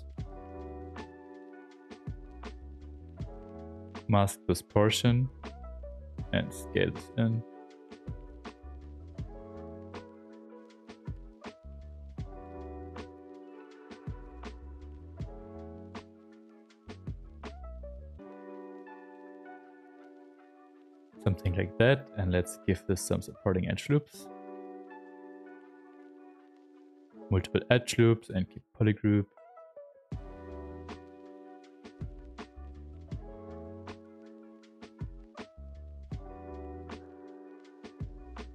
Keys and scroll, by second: 5.0 w, 10.9 s, 11.8 s, 17.3 q.